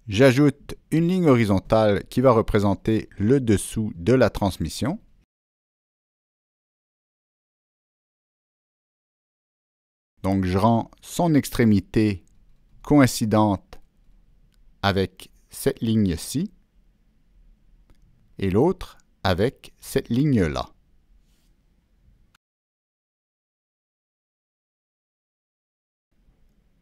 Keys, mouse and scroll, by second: 0.1 click, 1.7 Escape, 1.7 Return, 1.7 click, 6.2 right drag, 7.4 right click, 11.9 click, 14.6 click, 15.2 Escape, 16.6 click, 16.8 Escape, 17.5 shift+click, 17.7 shift+Escape, 20.2 click, 21.8 click, 22.6 shift+click, 25.3 click, 25.9 click, 26.7 right click.